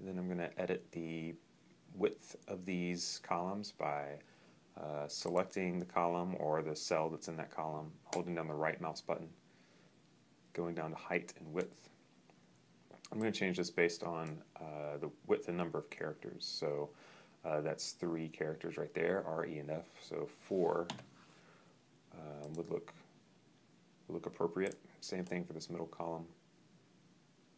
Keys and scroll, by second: 20.8 4.